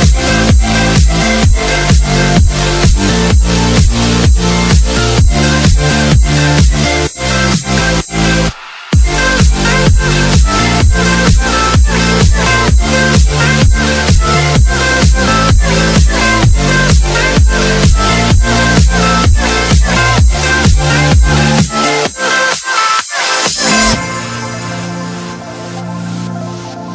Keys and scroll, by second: 0.0 Delete, 3.3 t, 3.7 r, 4.0 Escape, 6.5 Escape, 8.4 e, 8.8 shift+F2, 9.6 alt+c, 12.2 F3, 16.1 alt+c, 16.9 F4, 17.8 Escape, 20.0 c, 20.4 shift+F2, 21.6 alt+c, 24.2 F3.